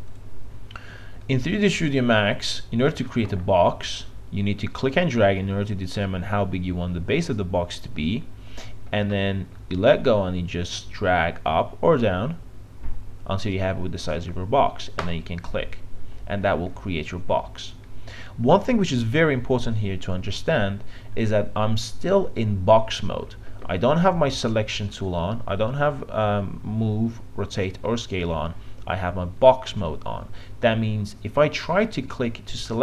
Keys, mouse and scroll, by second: 11.2-32.8 drag.